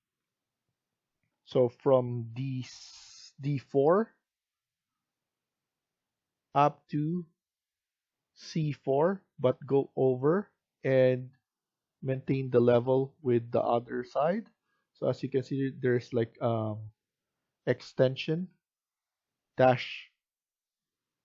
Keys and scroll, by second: 1.1 F1.